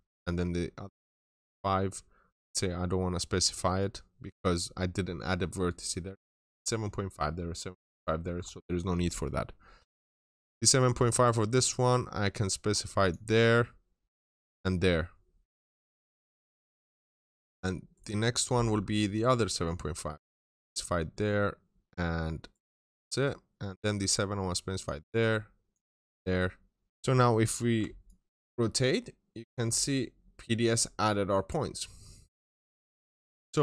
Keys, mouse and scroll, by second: 9.4 scroll up 1, 9.5 middle click, 10.0-12.9 scroll up 1, 12.9 click, 15.1 scroll down 1, 15.3 middle click, 17.1-17.7 scroll down 1, 17.8 right click, 18.6-18.9 scroll up 1, 19.3 click, 20.6 scroll down 1, 20.7 middle click, 21.3 scroll up 1, 22.3 right click, 22.8-23.5 scroll down 1, 23.5 middle click, 23.5 scroll down 1, 23.7 scroll up 1, 24.6 click, 26.0 middle click, 26.9 scroll down 1, 27.6-29.6 ctrl+shift+middle drag, 27.9 ctrl+shift+click, 29.7-30.7 scroll up 1, 30.7 scroll down 1, 30.9 middle click, 32.7 click.